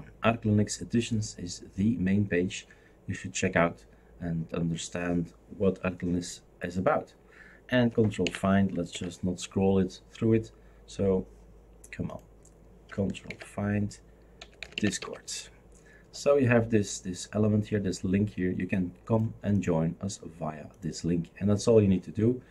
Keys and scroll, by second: 8.2 ctrl+d, 8.9 ctrl+f, 13.3 ctrl+f, 14.1-15.5 typing.